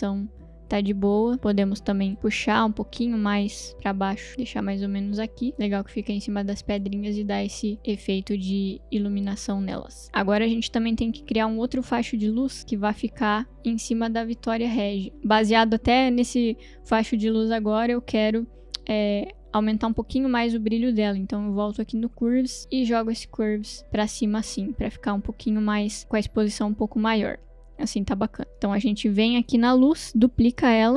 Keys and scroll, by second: 3.7 v.